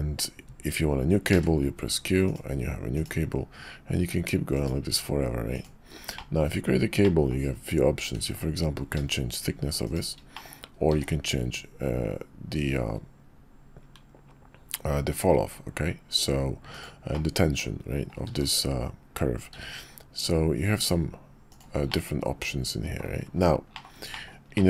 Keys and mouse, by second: 6.1-7.0 drag, 7.0-14.7 middle drag, 14.7-17.8 drag, 17.8-24.6 middle drag.